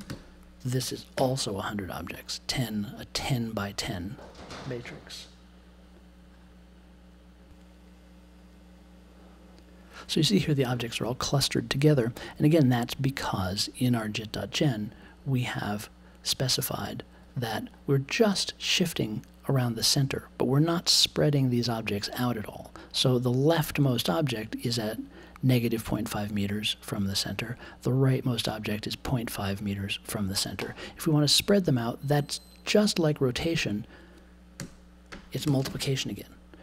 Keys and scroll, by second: 1.1 super+j, 34.5 n, 35.4 shift+8, 35.6 space.